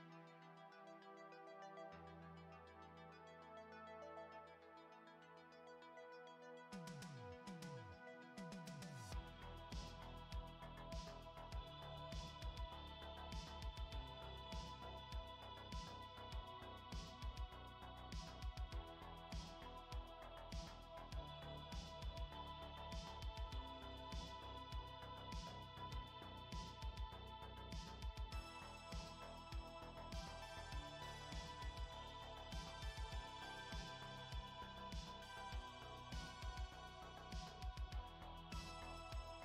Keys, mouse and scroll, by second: 0.7 right click, 4.6 click, 5.4 F2, 6.9 l, 11.3 right click, 12.9 click, 13.5 F2, 18.1 click, 18.6 right click, 20.4 click, 22.0 click, 23.6 click, 25.1 click, 29.8 click, 30.6 click, 31.4 middle click, 32.2-33.2 scroll down 4, 33.2 middle click, 36.1 scroll down 2, 36.6 middle click, 38.6 click.